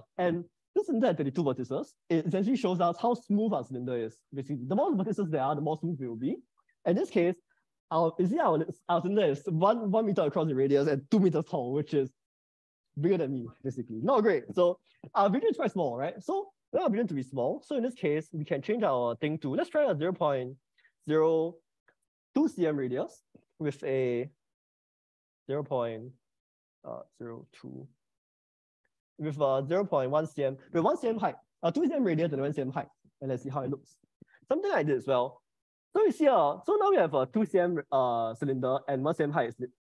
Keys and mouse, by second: 8.3-24.3 drag, 24.7-30.5 drag, 35.2-36.3 middle drag, 36.5 middle click.